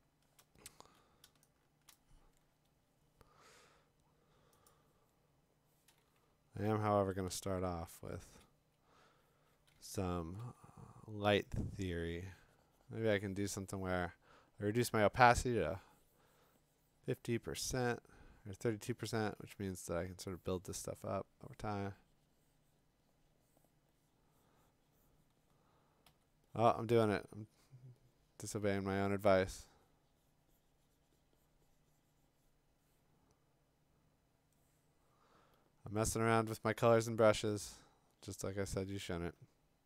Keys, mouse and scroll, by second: 0.0-1.9 typing, 0.4 click, 1.5 middle click, 1.9 click, 4.7 click, 6.6-8.3 ], 8.3 click, 10.2-10.9 typing, 26.0 x, 29.2 x, 34.3 click, 36.0 click, 37.4 click, 39.8 click.